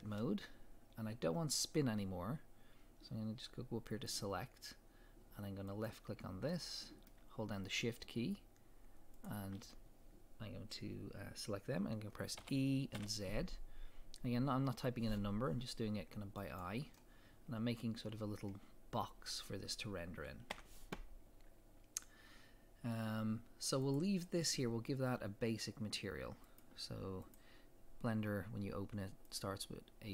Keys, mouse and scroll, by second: 3.9 click, 5.7 click, 6.5-7.8 middle drag, 7.8 shift+click, 9.2 click, 12.4 e, 16.6 click, 17.0-23.8 middle drag, 20.5 Tab, 23.8 click, 26.5 click, 27.2-30.1 drag.